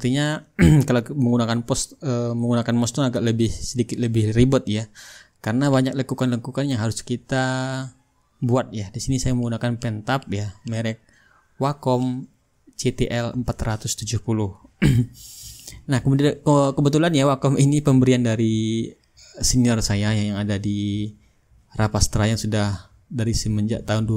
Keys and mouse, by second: 6.1-7.2 drag, 7.5-9.2 middle drag, 9.2-24.1 drag, 14.2 shift+right click, 21.5 shift+right click.